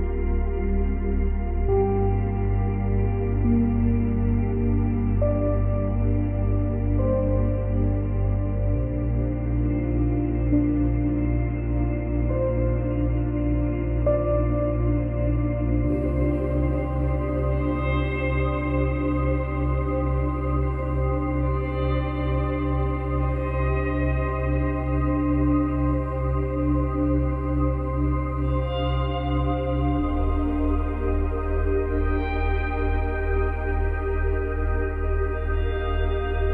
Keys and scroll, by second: 1.6 ctrl+z, 33.7 ctrl+z, 35.1 ctrl+z.